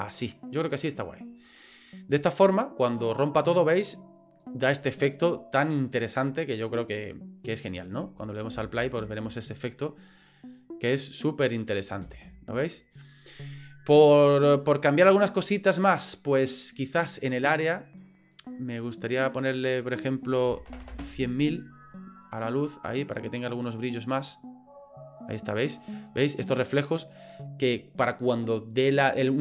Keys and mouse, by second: 2.4-4.5 drag, 6.7-7.8 drag, 8.3 click, 8.7 space, 12.1 space, 16.9 click, 18.3-21.9 drag, 20.8 KP_0, 22.7-26.1 drag.